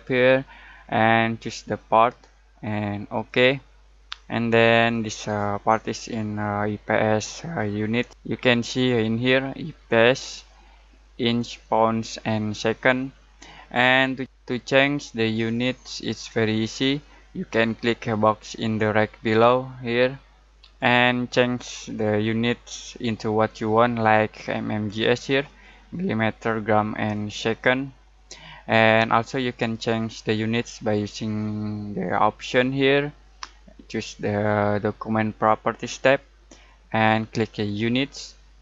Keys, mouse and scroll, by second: 0.1 click, 20.5 click, 27.0 click, 32.3 click, 32.5 click, 35.2 click, 37.6 click.